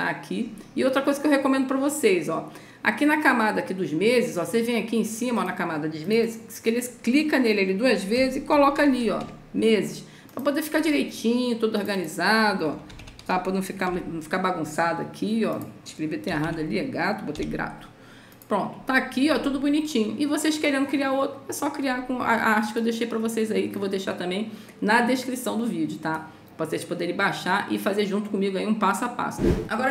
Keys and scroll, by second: 7.8-9.6 typing, 12.6-14.3 typing, 16.2 BackSpace, 17.2 o.